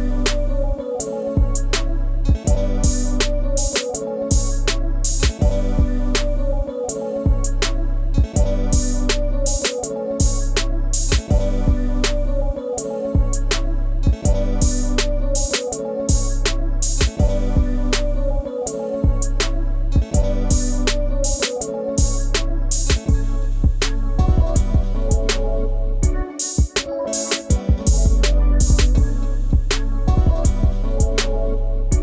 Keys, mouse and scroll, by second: 0.4 space, 0.7 ctrl+click, 3.3-4.2 scroll down 1, 4.3-4.7 scroll up 1, 5.2-5.8 scroll down 1, 6.5 shift+click, 8.4 scroll up 1, 13.3 shift+click, 14.2 shift+click, 14.7 shift+click, 15.0-15.3 scroll down 1, 18.3 shift+click, 23.5 scroll down 1.